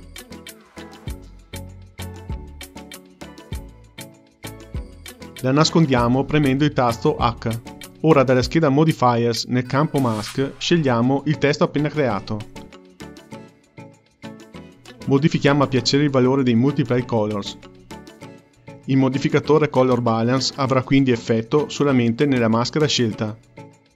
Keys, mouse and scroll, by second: 6.5 h, 7.9 click, 10.4 click, 12.2-14.7 drag, 15.0-18.1 drag.